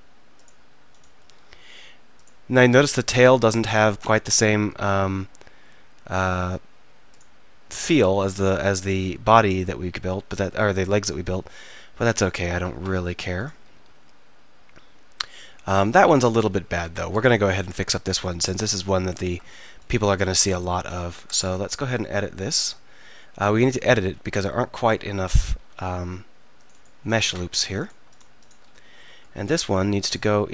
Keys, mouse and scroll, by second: 1.3 r, 3.2 r, 7.2-7.8 right drag, 7.8-9.0 middle drag, 9.0-10.4 right drag, 9.0 r, 12.4 drag, 13.8 r, 16.4-17.1 drag, 17.2 click, 18.3 middle drag, 18.7 middle click, 20.4 Tab, 21.0 Tab, 21.3 Tab, 21.6 middle click, 22.0 middle click, 24.6-25.6 middle drag, 25.6 ctrl+r, 29.0 click, 29.0 right click, 29.5 click, 30.2-30.5 right drag.